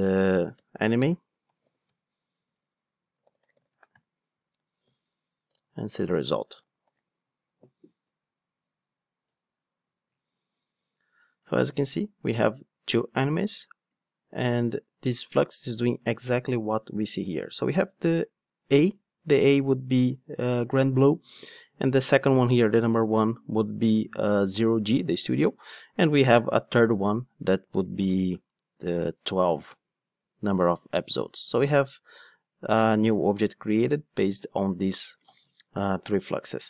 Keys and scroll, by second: 0.6 Return, 6.8 ctrl+shift+d.